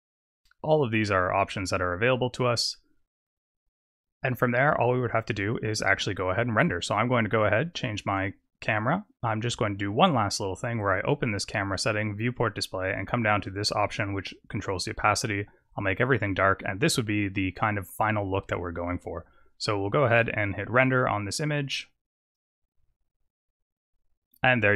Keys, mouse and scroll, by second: 6.7 click, 10.2 click, 13.3 click, 14.5 click, 15.7 click, 20.0 click.